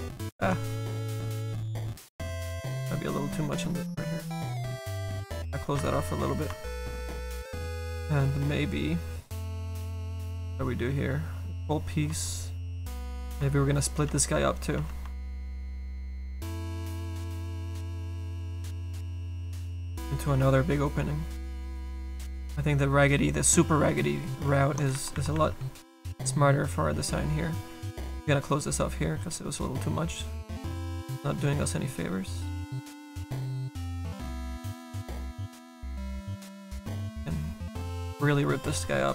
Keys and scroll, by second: 14.1 s, 14.8 s, 25.0 ctrl+z, 30.8 ctrl+z.